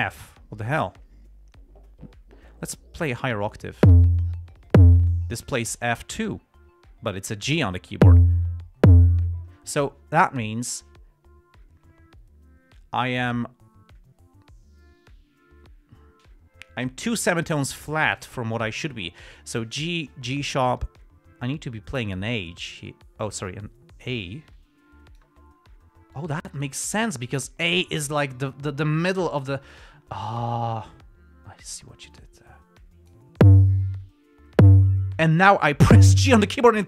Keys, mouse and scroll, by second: 21.3 click, 26.5 click, 27.2-33.6 drag.